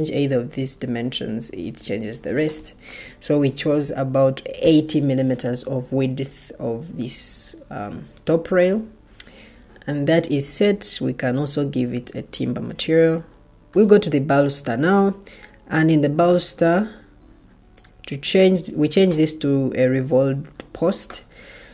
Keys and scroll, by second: 4.1-5.0 typing, 11.2-12.6 typing.